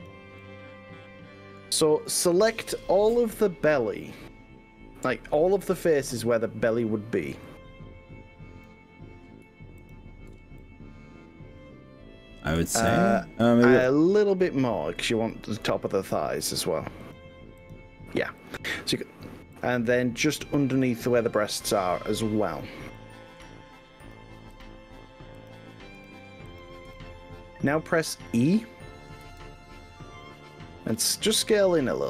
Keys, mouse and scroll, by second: 0.4-1.7 middle drag, 5.1 scroll up 2, 5.9 middle click, 7.5-8.7 drag, 9.9 shift+click, 10.7 middle click, 11.1 click, 11.3-12.7 middle drag, 12.9-14.1 middle drag, 15.1 click, 17.0 ctrl+click, 17.7 click, 18.5 ctrl+click, 19.5 ctrl+click, 20.3 ctrl+click, 22.3 middle click, 23.0 middle click, 24.5 ctrl+click, 25.5 ctrl+click, 26.0 ctrl+click, 26.5 ctrl+click, 26.9 middle click, 28.4 middle click, 28.6 middle click, 28.8 middle click, 29.3 e.